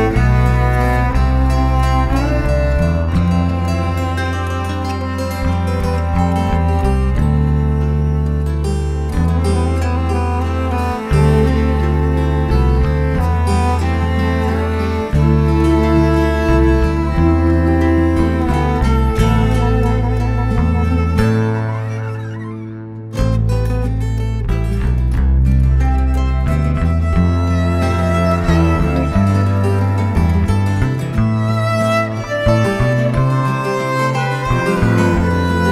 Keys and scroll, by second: 22.1 shift+m, 25.3 shift+super+z, 30.9 shift+x, 31.4 alt+shift+Delete, 31.9 alt+shift+super+d, 32.1 shift+super+v, 32.6 shift+v, 34.4 shift+super+t.